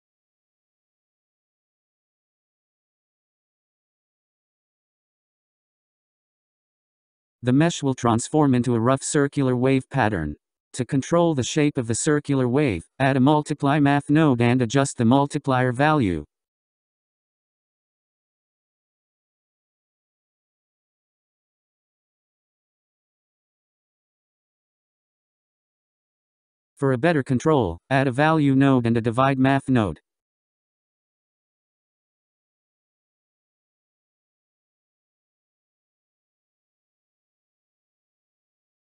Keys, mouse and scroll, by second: 0.7 shift+a, 5.0-5.9 scroll up 7, 5.9-11.6 drag, 12.3 shift+d, 13.9-18.4 drag, 19.9 click, 21.8-25.6 drag, 27.8 shift+a, 33.8 click, 34.8 shift+d, 36.3-37.9 drag, 37.9-38.5 scroll down 5, 38.5-38.8 scroll up 7.